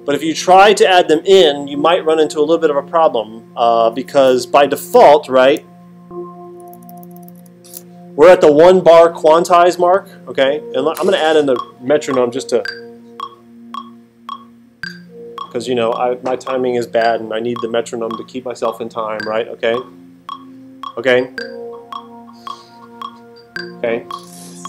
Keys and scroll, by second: 4.9 alt+super+8, 6.4 alt+super+=.